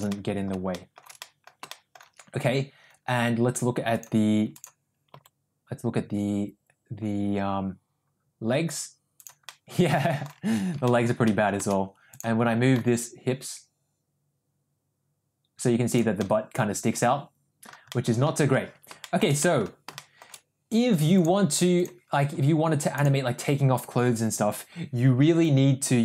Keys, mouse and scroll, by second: 0.1-0.5 middle drag, 0.7 shift+middle drag, 1.2 middle drag, 1.7 shift+middle drag, 4.2 click, 5.3 g, 9.5 middle click, 10.8 ctrl+z, 10.9 middle click, 11.3 middle click, 12.9 g, 16.3-17.7 middle drag, 18.0 middle drag, 18.8 ctrl+z, 19.0 middle drag, 19.4 middle click, 20.0 middle drag, 21.3 click, 23.0 click.